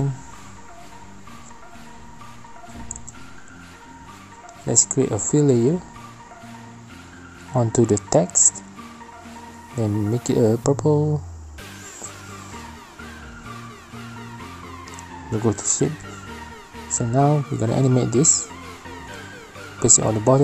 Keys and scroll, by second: 3.6-4.9 typing, 18.9 alt+shift+p.